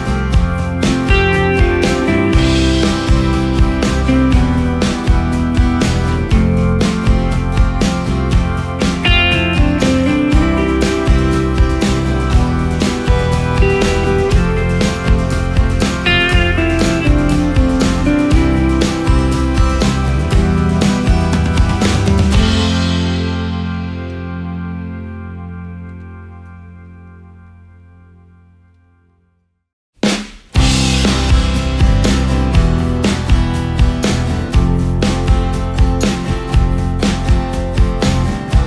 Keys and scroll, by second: 3.2 ctrl+shift+space, 4.3 ctrl+shift+space, 6.4 typing, 8.5-9.9 typing, 13.5 typing, 14.8 ctrl+space, 15.4 ctrl+space, 18.2 ctrl+space, 25.0 space, 27.3 ctrl+space, 28.3 ctrl+alt+space, 32.0 Up, 32.3 Up, 33.5 space, 38.2 ctrl+space.